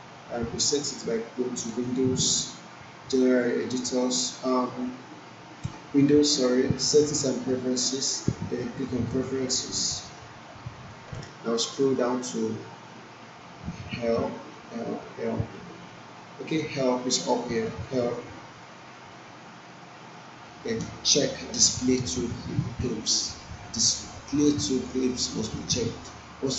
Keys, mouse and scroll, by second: 1.7 click, 9.0 click, 11.6-12.8 scroll down 1, 15.6-17.5 scroll up 1, 17.8 click, 23.0 click.